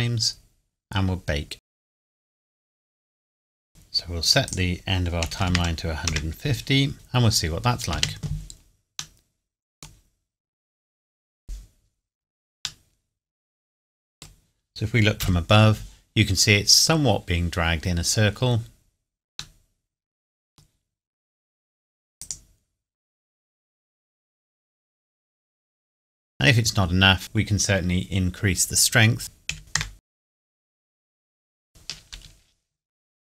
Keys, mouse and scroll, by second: 1.6 click, 4.4 click, 5.2 KP_1, 5.4 KP_0, 6.0 KP_Enter, 6.9 scroll down 1, 7.9 space, 9.2 middle click, 10.1 scroll up 1, 12.8 middle click, 15.2 KP_7, 19.6 middle click, 22.2 click, 27.2 click, 29.2 click, 29.5 KP_Decimal, 29.6 KP_4, 29.7 KP_Enter, 29.9 click, 32.1 space.